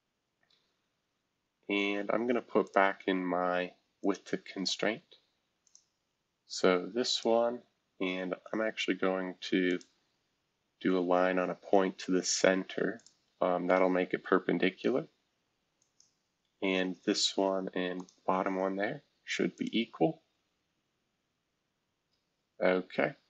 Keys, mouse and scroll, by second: 0.0-2.3 scroll down 3, 2.3 scroll down 1, 2.6 click, 4.0 click, 5.6 click, 6.0 Escape, 7.1 click, 7.8 scroll down 2, 8.5 scroll down 1, 9.7 shift+click, 12.2-14.1 drag, 14.1-15.8 scroll up 2, 15.8-17.1 drag, 17.9 shift+click, 19.5 click, 20.0 scroll down 1, 20.8 scroll down 2, 21.4 scroll up 1, 21.9 scroll up 1.